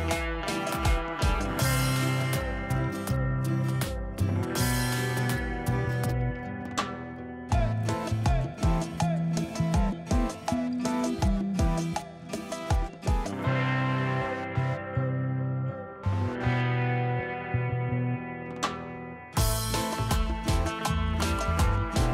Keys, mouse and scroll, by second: 2.2 ctrl+d, 3.2 ctrl+d, 3.5 ctrl+d, 3.8 ctrl+d, 4.0 ctrl+d, 4.2 ctrl+d, 4.4 ctrl+d, 4.6 ctrl+d, 4.8 ctrl+d, 5.0 ctrl+d, 5.2 ctrl+d, 5.4 ctrl+d, 5.5 ctrl+d, 5.7 ctrl+d, 6.1 ctrl+d, 6.6 ctrl+d, 7.2 ctrl+d, 8.0 ctrl+d, 11.5 ctrl+shift+z, 11.9 scroll down 1, 14.8 scroll up 1.